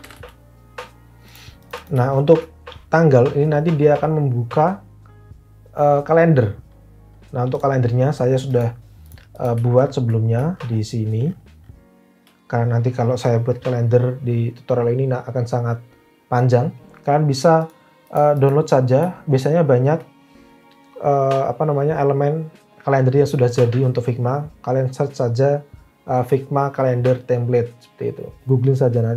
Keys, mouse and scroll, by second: 0.0-0.6 typing.